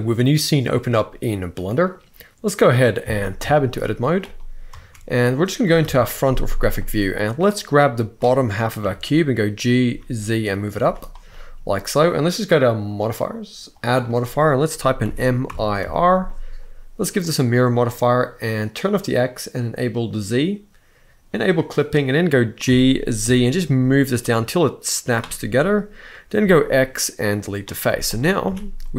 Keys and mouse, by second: 1.2 middle click, 3.9 click, 4.4 Tab, 5.5 KP_1, 6.2 z, 7.3 click, 8.6 g, 9.6 z, 10.3 click, 10.5 z, 11.0 middle click, 12.7 click, 13.5-17.0 drag, 18.4 click, 19.7 click, 21.1 click, 21.7 middle click, 22.4 g, 22.9 z, 24.6 click, 26.1 x, 27.6 z, 28.2 a, 28.5-28.9 middle drag.